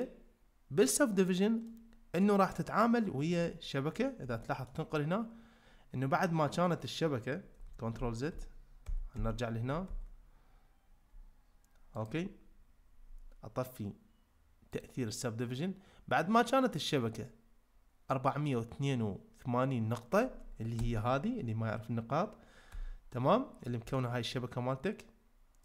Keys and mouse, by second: 1.6-2.2 middle drag, 3.3 click, 4.4 shift+middle click, 8.0 ctrl+z, 8.3 ctrl+z, 8.8 ctrl+z, 9.2 ctrl+z, 9.9 ctrl+z, 11.9 click, 14.7 click, 20.8 Tab, 22.7 Tab, 23.1-23.6 middle drag, 23.9-24.3 shift+middle drag.